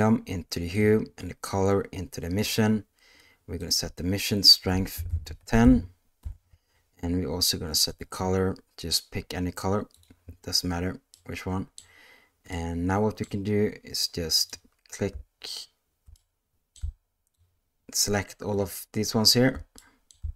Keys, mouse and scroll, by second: 1.5 click, 1.7-2.4 drag, 3.7-6.2 drag, 5.1 BackSpace, 11.1-11.8 middle drag, 12.5 middle click, 14.4 click, 16.2-16.7 middle drag, 17.4-18.5 shift+drag, 19.8 middle click.